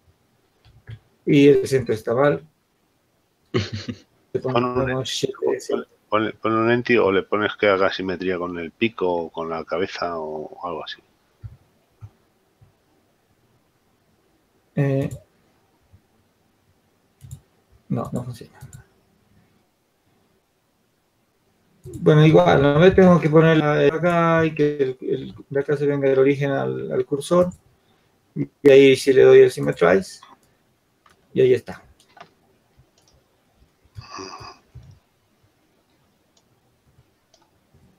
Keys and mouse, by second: 1.0 ctrl+z, 4.9-6.7 drag, 6.7 shift+s, 9.3-14.7 drag, 16.3-17.8 drag, 23.1 shift+s, 25.5 shift+s, 30.3-32.5 drag, 35.5-37.9 drag.